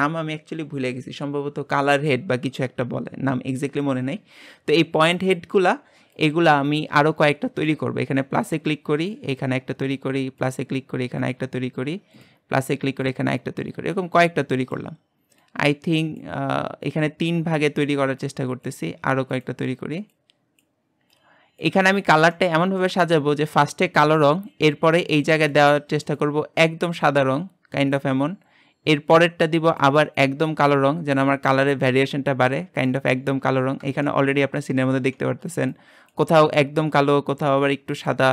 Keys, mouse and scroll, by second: 29.4-31.2 drag, 34.0-38.3 shift+middle drag.